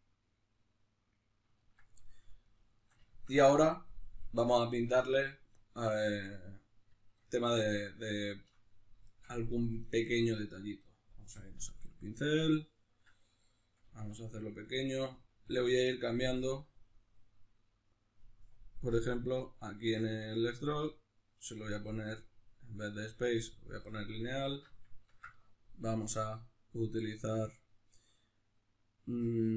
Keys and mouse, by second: 11.1-13.4 drag, 13.4-14.7 middle drag, 13.9 f, 14.7 click, 15.1 f, 15.5 click, 24.0-29.5 middle drag, 24.6 alt+q.